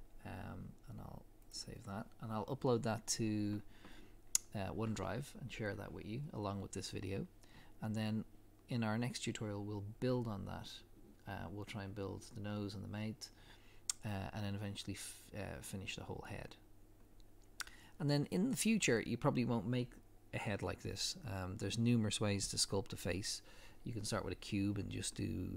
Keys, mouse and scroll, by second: 1.6 click, 11.5 scroll down 1, 14.5 scroll down 1.